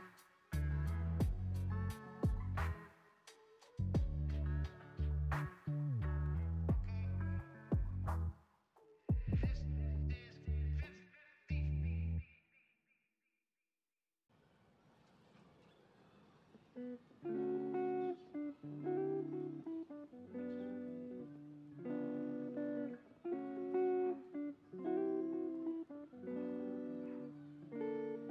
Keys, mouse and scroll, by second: 1.4 click, 3.1-4.4 middle drag, 4.4 click, 5.4 click, 10.0 click, 11.3 click, 12.9-14.0 middle drag, 14.0 click, 17.4 click, 18.8 click, 20.1 click, 20.5-23.5 middle drag, 26.3-27.6 middle drag, 27.6-28.3 scroll up 1.